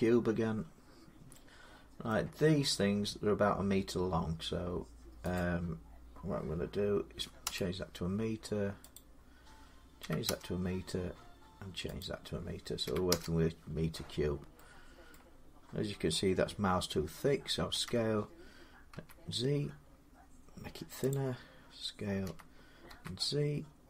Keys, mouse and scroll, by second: 0.7 scroll down 2, 0.9 scroll, 1.9-5.9 middle click, 5.2 click, 7.0 typing, 8.8 click, 9.8 1, 11.8 click, 12.4 1, 12.6 1, 14.9 middle click, 15.6 KP_1, 17.5 s, 18.7 z, 19.8 middle click, 20.9-22.8 drag, 22.1-22.7 typing.